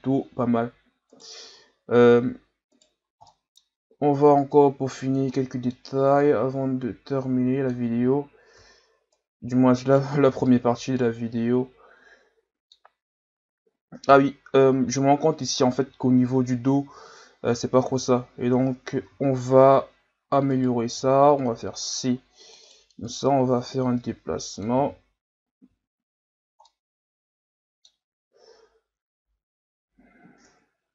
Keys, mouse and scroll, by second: 0.5-1.1 scroll up 4, 1.1 right click, 1.4 Tab, 2.7 right click, 3.1 scroll down 5, 3.3 middle click, 3.8 scroll up 2, 4.4-5.4 drag, 5.4 middle click, 6.2 click, 8.0 Tab, 8.6 Tab, 9.1 right click, 10.3 Tab, 10.8 scroll down 2, 10.9-13.3 middle drag, 13.3-14.1 scroll up 1, 14.1 KP_3, 15.1-15.7 scroll up 2, 15.7-17.9 scroll up 2, 17.9 Tab, 19.0 z, 20.5 right click, 20.9 c, 23.0-24.8 drag, 24.8 z, 25.4-25.7 scroll down 2, 25.7 Tab, 26.7-30.5 middle drag, 30.5 KP_3.